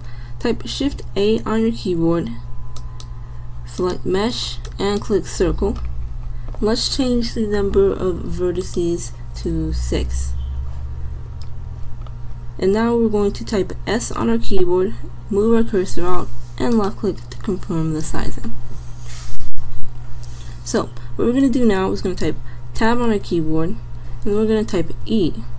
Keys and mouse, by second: 1.0 shift+a, 8.6-10.5 middle drag, 11.3-14.0 drag, 14.0 s, 22.9 Tab, 25.1 e.